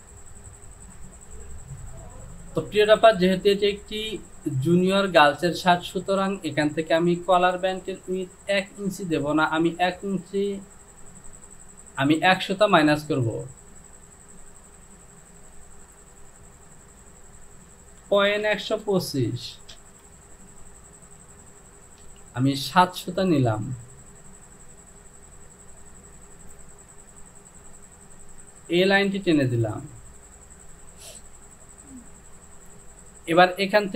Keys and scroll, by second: 18.1 KP_Decimal, 18.5 KP_1, 18.8 KP_2, 19.0 KP_5, 19.8 Return, 22.0 Delete.